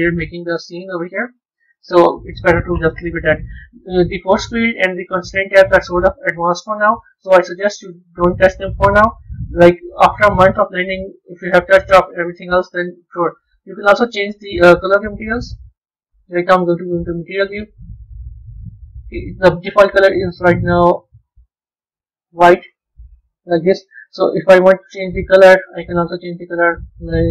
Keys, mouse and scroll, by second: 3.4 click, 4.9 click, 6.4 click, 6.9 click, 7.2 click, 7.7 click, 13.7 click, 15.6 z, 18.8-20.2 middle drag, 20.2-22.5 right drag, 22.5-22.8 scroll up 5, 23.1-24.6 middle drag, 24.6 click.